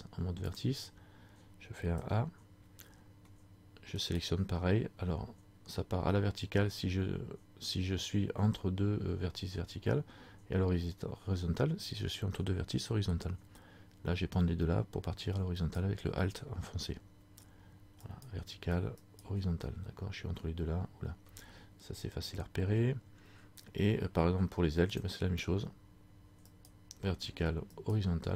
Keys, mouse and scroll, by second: 0.6 click, 2.2 a, 4.3 alt+right click, 15.7 alt+right click, 22.5 alt+right click, 25.2 click, 26.6 alt+right click.